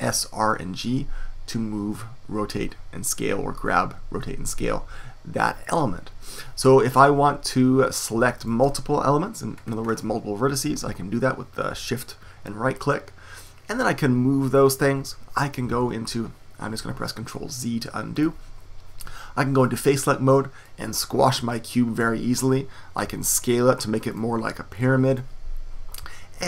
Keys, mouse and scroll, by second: 9.5-11.7 middle drag, 13.4-15.6 drag, 15.7 super+z, 18.1-19.7 drag, 20.1 click, 21.2-23.0 drag, 23.0 s, 24.7-26.2 drag.